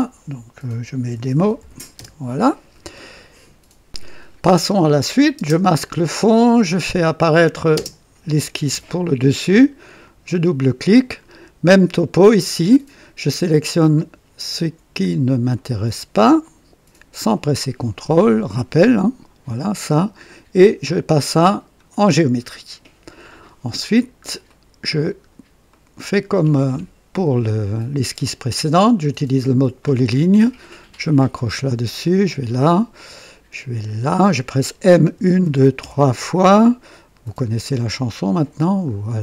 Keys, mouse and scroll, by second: 0.0-2.0 typing, 5.3 space, 7.1 click, 7.7 space, 10.0 click, 11.1 scroll up 1, 11.6-12.3 right drag, 13.9 click, 15.5 click, 17.2 click, 18.2 click, 21.4 click, 23.8-24.1 scroll up 1, 24.4 right click, 25.0 scroll up 1, 25.6-26.3 right drag, 29.7 click, 31.2 click, 31.9 click, 33.7 click, 35.0-35.7 typing, 38.8 click.